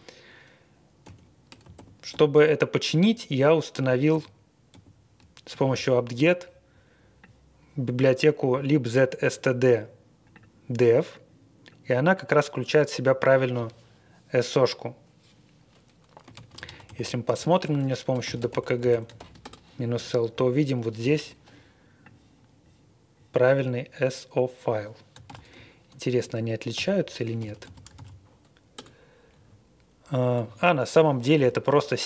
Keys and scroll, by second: 1.0 ctrl+l, 1.7 alt+p, 2.1 alt+p, 3.0 alt+p, 3.7 alt+p, 4.1 alt+p, 4.7 alt+p, 16.3 ctrl+a, 16.7 alt+d, 16.9 alt+d, 17.2 alt+d, 17.6-19.7 typing, 25.3 super+c, 26.7 ctrl+l, 27.4 typing, 28.0 super+v, 28.7 Return, 29.3 Up, 31.3 scroll up 1.